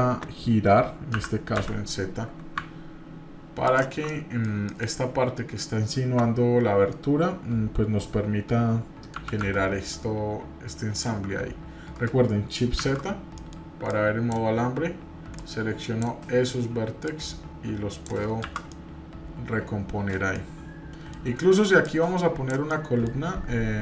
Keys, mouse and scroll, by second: 4.1 middle click, 4.7 shift+middle click, 12.8 shift+z, 13.3 middle click, 13.9 click, 15.4 click, 17.0-18.1 drag, 18.4 shift+z, 18.7-20.2 middle drag, 20.3 middle click, 21.8 click, 22.7 middle click, 23.2-23.8 scroll up 2.